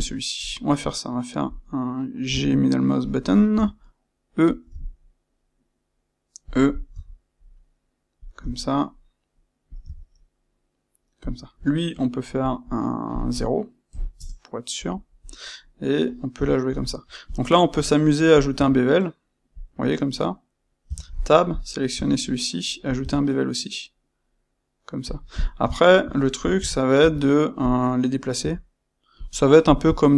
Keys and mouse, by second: 0.3 click, 2.2 g, 3.1 click, 3.5 e, 4.5 click, 4.6 e, 6.5 click, 6.9 e, 8.1 click, 8.3 e, 9.7 click, 9.7 e, 11.2 click, 12.3-15.2 drag, 14.1 Return, 16.3 c, 17.2 click, 17.7 space, 22.9 click, 25.7 shift+middle click, 26.5 n, 26.9 Tab, 27.6 click, 28.3 g, 29.6 click, 29.8 g.